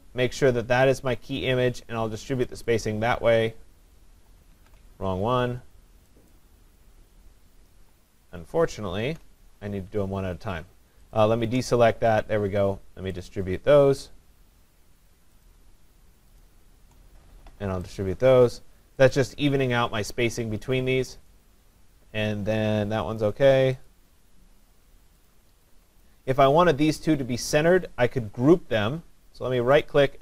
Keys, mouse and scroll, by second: 2.7 click, 4.6 ctrl+z, 6.3 click, 9.0 ctrl+z, 11.2 shift+click, 13.3 click, 15.5 shift+click, 16.4 shift+click, 18.0 click, 19.1 click, 23.9 click, 25.3 click, 26.0 click, 29.8 right click.